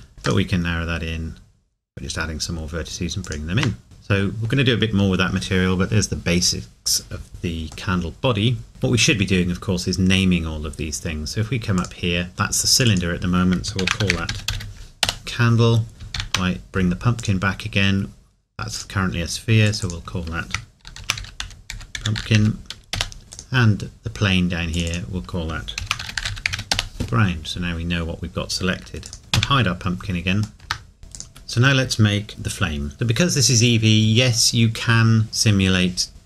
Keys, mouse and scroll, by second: 3.2 click, 3.6 Tab, 3.8 middle click, 4.2 scroll down 1, 7.9 middle click, 8.7 click, 11.8 click, 15.0 Return, 29.0 click, 30.5 ctrl+s.